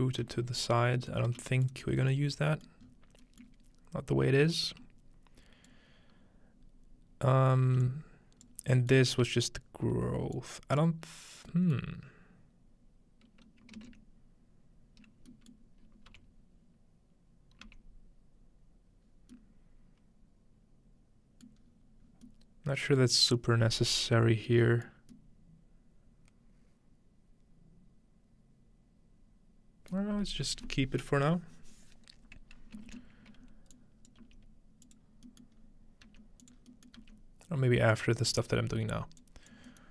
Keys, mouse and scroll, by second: 0.2 g, 1.3 g, 2.4-4.5 scroll up 1, 4.5-5.7 drag, 6.1 scroll down 1, 7.3-7.9 scroll up 1, 7.9 click, 8.6 scroll down 1, 8.9 middle click, 9.2 scroll up 1, 10.4 click, 11.0 scroll down 1, 13.8 ctrl+space, 15.6-17.4 middle drag, 16.1 m, 17.6 m, 21.5-22.3 middle drag, 21.6-23.3 scroll up 1, 23.3-24.5 middle drag, 23.3-26.2 scroll down 1, 30.2-32.8 middle drag, 32.9 ctrl+space, 33.7-35.4 drag, 34.2 g, 35.1-35.6 scroll down 1, 35.4-37.0 middle drag, 35.6 scroll up 1, 36.1-37.0 typing, 37.4-38.2 scroll down 1, 38.2-38.7 scroll up 2, 39.2 click, 39.2-39.8 scroll up 2, 39.8 scroll down 2.